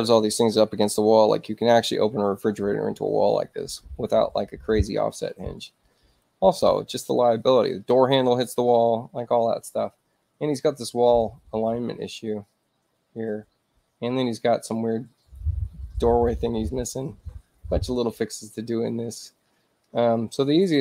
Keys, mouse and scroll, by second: 19.8 ctrl+alt+c.